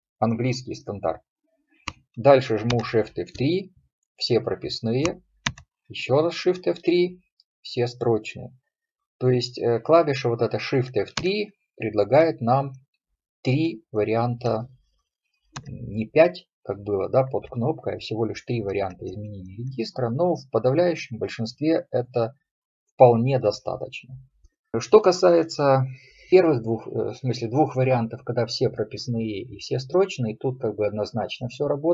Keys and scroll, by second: 2.8 shift+F3, 5.5 shift+F3, 11.3 shift+F3, 15.6 shift+F3.